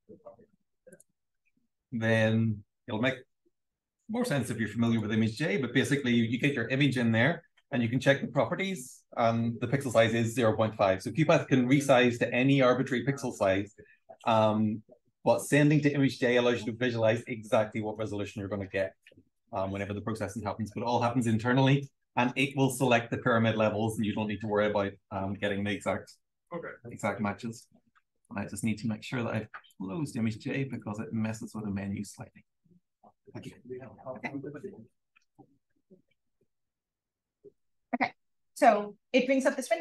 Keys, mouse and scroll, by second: 0.8 click, 1.3 click, 26.4 click, 36.3 click, 37.5 BackSpace.